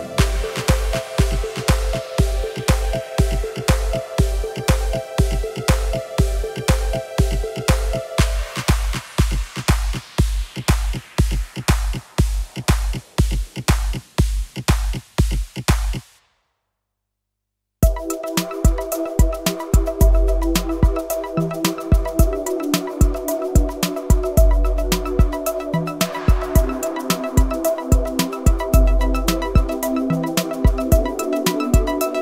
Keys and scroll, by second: 4.7 Escape, 5.6 g, 11.7 Tab, 18.2 KP_1, 26.1 Tab, 27.6 ctrl+r.